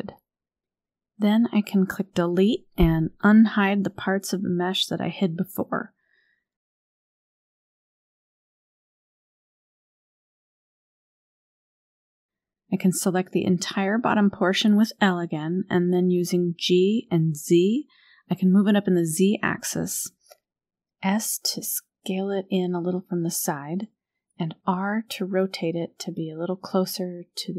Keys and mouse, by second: 8.1 alt+h, 9.9 KP_1, 12.0 click, 12.7 l, 14.7 g, 15.2 z, 17.3 g, 22.3 s, 25.1 KP_3, 27.2 g.